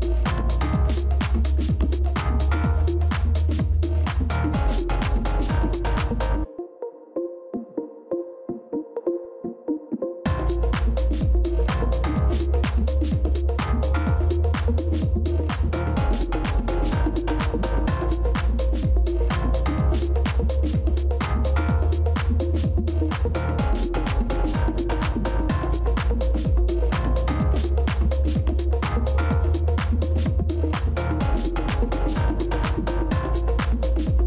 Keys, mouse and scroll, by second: 0.3 space, 0.4 ctrl++, 0.6 ctrl++, 0.7 ctrl++, 1.2 space, 4.1 shift+click, 11.5 ctrl+-, 11.7 ctrl+-, 11.8 ctrl+-, 12.0 ctrl+-, 13.7 ctrl+d, 14.1 ctrl+d, 14.4 ctrl+d, 14.5 ctrl+d, 15.0 ctrl+-, 15.0 d, 16.0 ctrl+d, 19.1 space, 21.9 ctrl+space, 22.0 ctrl+click, 23.1 ctrl+-, 23.2 ctrl+-, 32.7 ctrl+-, 33.8 ctrl++.